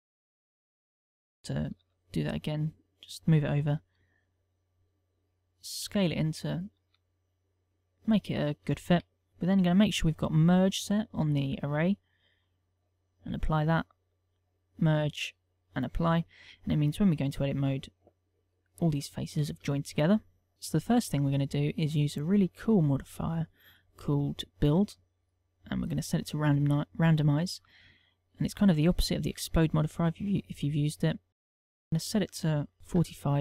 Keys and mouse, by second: 0.3 click, 0.9 KP_0, 2.5 g, 3.8 click, 4.8 s, 7.2 click, 7.6 g, 8.2 click, 9.4 ctrl+z, 11.3 click, 13.9 click, 14.5 click, 15.6 click, 16.3 click, 17.4 Tab, 18.7 click, 20.8 Tab, 22.2 click, 26.9 click, 29.7 click, 32.8 ctrl+click.